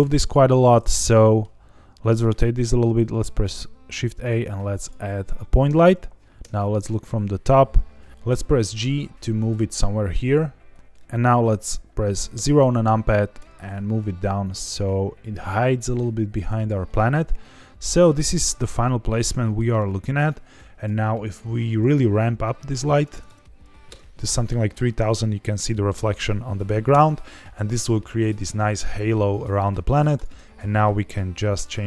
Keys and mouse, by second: 0.9-1.3 middle drag, 1.9 middle drag, 2.8 shift+a, 6.4 KP_7, 8.1 ctrl+z, 8.2 g, 10.7 click, 12.3 KP_0, 13.3 g, 16.5 click, 16.8 middle drag, 17.7-18.1 middle drag, 19.1-19.5 middle drag, 20.7 click, 21.6-24.3 drag, 23.1 KP_0, 23.2 KP_0, 25.1 middle drag, 26.9 KP_0, 30.1 drag.